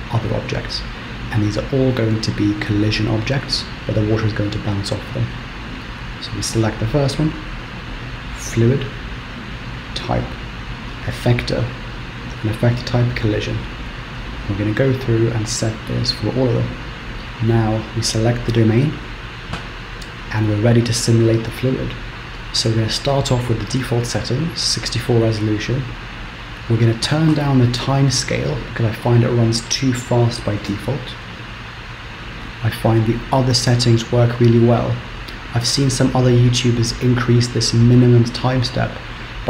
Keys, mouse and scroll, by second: 8.2 click, 9.3 click, 14.5 click, 16.0 click, 18.4 click, 20.0-21.4 scroll down 10, 26.5 click.